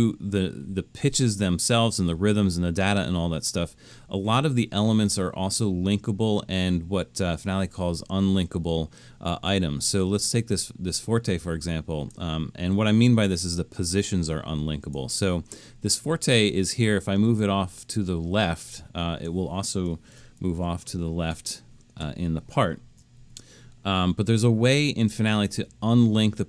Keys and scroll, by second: 20.4 alt+super+., 23.1 alt+super+/.